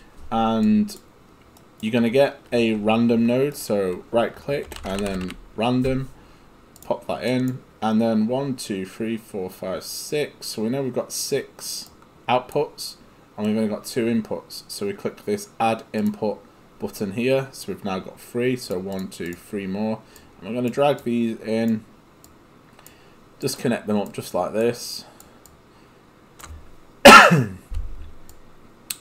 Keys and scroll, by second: 4.6-5.8 typing.